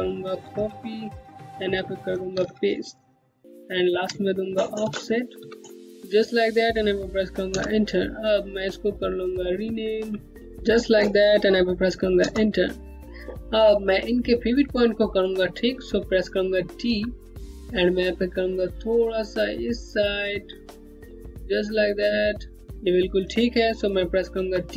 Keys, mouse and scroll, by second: 0.0 ctrl+c, 0.8 click, 2.0 ctrl+v, 4.4 shift+-, 5.0 o, 5.8 click, 7.1 Return, 8.8 click, 10.4 click, 11.8 Return, 13.0 click, 16.5 d, 18.0 click, 18.1 Home, 21.0 scroll up 1, 23.9 d, 24.4 scroll down 1.